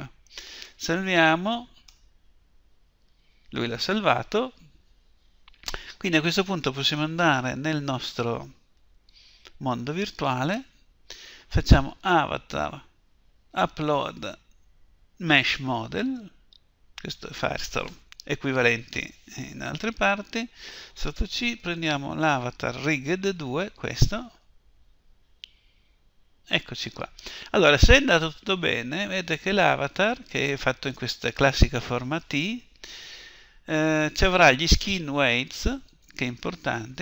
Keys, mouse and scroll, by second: 2.2 Return.